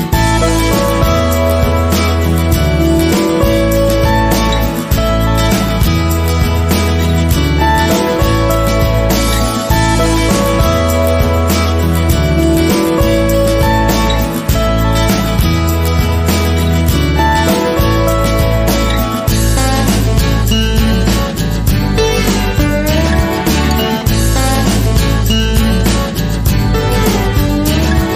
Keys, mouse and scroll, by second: 2.4 scroll down 1, 2.6 Tab, 2.8 click, 3.2 Tab, 9.4-10.3 scroll down 3, 9.6 Tab, 9.8 click, 10.0 middle click, 10.3 click, 10.6 scroll up 1, 10.6-11.6 shift+middle drag, 11.8 drag, 12.1 right drag, 12.4-12.7 middle drag, 12.7 click, 12.8-13.8 middle drag, 13.3 scroll up 2, 13.8 click, 14.0 middle click, 14.3 click, 14.6-15.2 middle drag, 15.2 click, 15.6-17.6 middle drag, 16.0 scroll up 1, 16.3 ctrl+z, 17.6 click, 18.6 click, 19.2-20.5 shift+middle drag, 20.5-21.0 drag, 21.0-22.3 middle drag, 22.3 click, 22.9 click, 23.1-26.2 shift+middle drag, 23.2 Tab, 23.6 scroll up 2, 24.6 scroll up 2, 26.4 scroll down 2, 26.5 middle click, 26.5 scroll up 1, 27.0 click, 27.2 scroll down 1, 27.3 scroll up 1, 28.0 click.